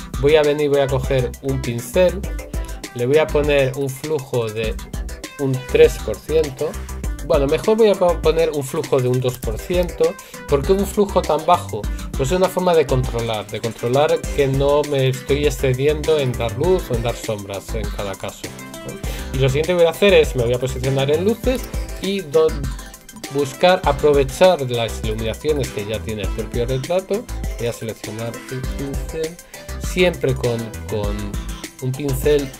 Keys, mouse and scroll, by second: 28.6 right click, 31.2 right click.